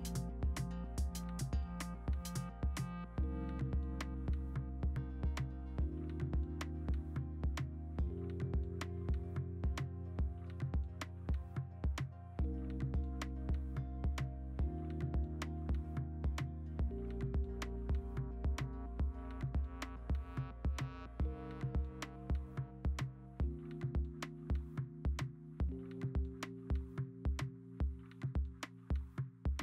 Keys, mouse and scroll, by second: 0.5 ctrl+z, 0.8-2.5 typing, 3.7 3, 4.1 ctrl+z, 5.4 ctrl+z, 6.0 ctrl+alt+z, 6.1 ctrl+alt+z, 6.6 ctrl+z, 6.9 3, 7.3 1, 8.6 ctrl+z, 10.1-10.4 typing, 12.8 ctrl+alt+z, 12.9 ctrl+alt+z, 14.5 3, 17.2 ctrl+z, 18.4 ctrl+z, 19.4 ctrl+a, 19.4 Delete, 19.5 ctrl+d, 21.1 2, 25.3-26.1 typing, 28.9-29.6 typing.